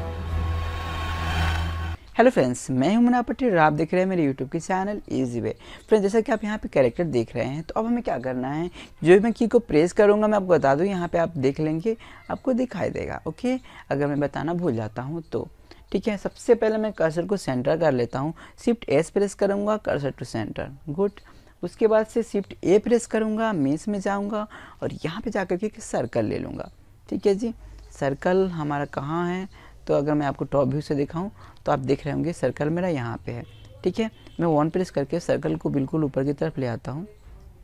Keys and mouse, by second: 14.9 shift+s, 20.7 shift+a, 24.9-28.0 middle drag, 29.8-32.3 middle drag, 32.3 KP_1, 34.0 click, 35.8-37.6 middle drag.